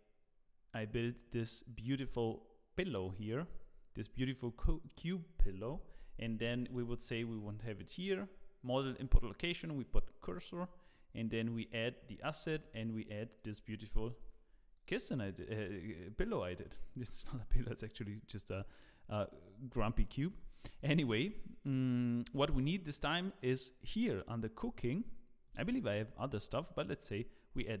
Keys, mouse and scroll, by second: 1.0 click, 1.0-1.7 scroll down 1, 1.7 click, 1.7-3.3 scroll down 1, 3.7-4.2 scroll down 1, 6.5 shift+right click, 9.8 click, 12.4 click, 12.4 s, 14.2 g, 15.0 middle click, 16.4 middle click, 17.1 middle click, 18.8-19.3 scroll up 1, 19.3-19.7 scroll down 2, 19.7 middle click, 20.3 x, 20.8 middle click, 21.4 shift+middle click, 23.1 click, 26.9 click, 27.5-27.8 scroll down 4, 27.6 click.